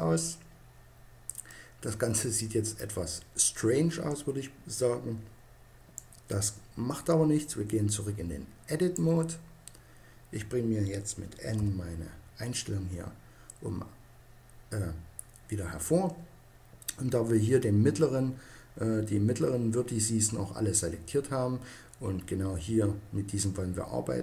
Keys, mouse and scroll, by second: 1.3 middle click, 2.0 typing, 5.8-7.5 drag, 11.4 n.